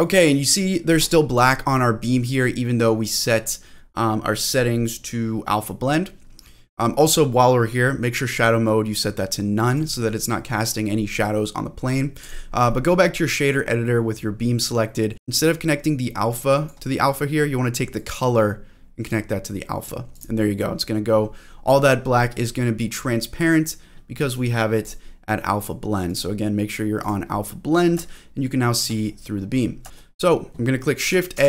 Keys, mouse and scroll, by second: 1.4 click, 3.1 click, 3.7-6.2 scroll down 7, 8.3-9.7 drag, 12.2 click, 12.7 middle click, 14.8-16.7 drag, 14.8 middle click, 18.0-19.2 drag, 20.1 click, 21.2-22.0 scroll up 4, 22.0 scroll down 1, 24.3 click, 26.0-27.0 drag, 28.1 shift+middle click, 28.6-29.3 shift+scroll up 4, 29.3-30.0 scroll down 3, 31.3 shift+a.